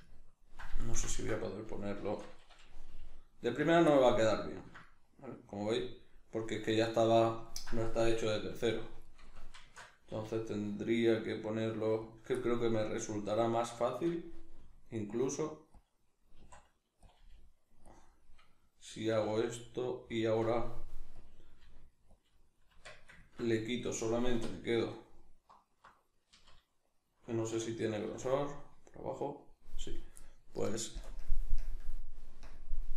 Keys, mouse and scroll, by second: 2.0 shift+Tab, 2.9 g, 3.7 click, 8.4 r, 9.2 right click, 9.6 shift+Tab, 10.2 r, 12.2 click, 12.4-15.8 middle drag, 14.6 r, 15.8 click, 16.4 s, 17.2 click, 17.2 g, 18.0 click, 18.1-20.2 middle drag, 19.1 r, 20.2 click, 20.4 r, 21.3 click, 21.6 g, 22.2 click, 22.4-24.9 middle drag, 22.7 Tab, 24.3 3, 24.9 alt+right click, 26.3 z, 27.5 \, 28.1 z, 28.3-32.9 middle drag, 30.9 ctrl+KP_Add, 32.4 ctrl+KP_Subtract.